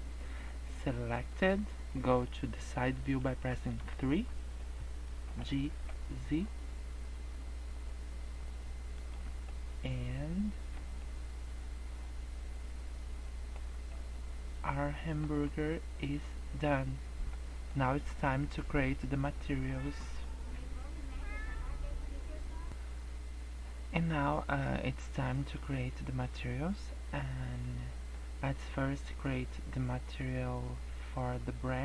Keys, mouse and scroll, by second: 0.2 scroll up 3, 1.2 click, 3.9 KP_3, 5.3 g, 9.5 middle click, 10.9 scroll down 2, 11.0 middle click, 13.6 scroll up 3, 13.9 middle click, 15.5 middle click, 15.5 scroll down 2, 17.5 middle click.